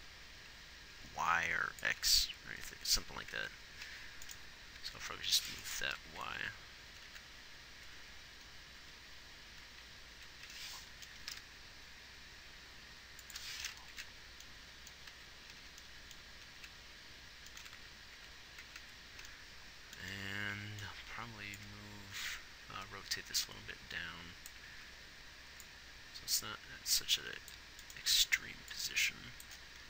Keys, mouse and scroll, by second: 2.3 Left, 3.7 Right, 5.2 g, 6.4 Right, 6.8 Right, 7.4 Left, 8.2 Left, 9.2 Left, 10.0 Right, 10.5 Right, 11.6 g, 14.3 Left, 15.5 Right, 17.0 Left, 18.0 Left, 18.2 Left, 19.1 Right, 19.2 Right.